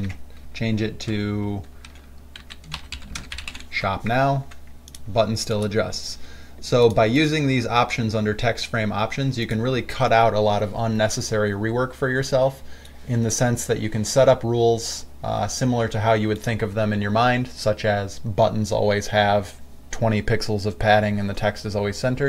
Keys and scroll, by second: 0.2 ctrl+a, 2.7-4.3 typing.